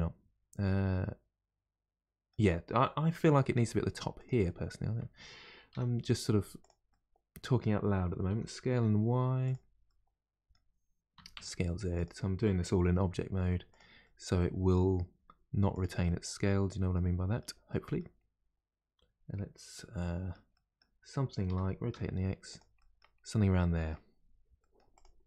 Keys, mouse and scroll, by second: 3.1 middle click, 3.5 g, 4.4-5.7 middle drag, 5.7 r, 6.9-8.3 middle drag, 8.3 s, 9.8-11.1 middle drag, 11.1 s, 14.0-15.1 middle drag, 15.1 g, 16.0-18.1 middle drag, 18.1-19.7 scroll up 3, 19.7-21.5 middle drag, 21.5 r, 22.7-23.1 middle drag, 23.1-23.5 scroll down 1, 23.5-24.1 middle drag, 24.1-24.5 scroll down 1, 24.5-24.9 middle drag, 24.9 click.